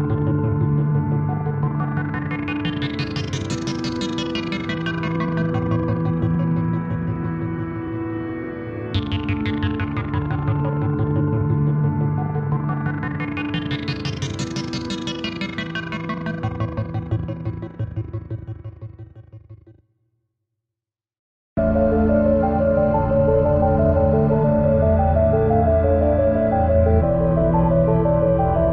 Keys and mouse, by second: 2.4 ctrl+z, 3.6 click, 4.5 typing, 4.7 click, 8.8 click, 8.8 typing, 10.0-12.0 shift+drag, 13.5 click, 13.5 typing, 15.5 click, 15.5 typing, 17.2 click, 17.2 typing, 19.7-20.2 typing, 20.0 click, 20.8 click, 21.7-23.5 alt+drag, 23.7 alt+click, 23.7 typing, 24.1-28.3 shift+drag, 28.5 click, 28.5 typing.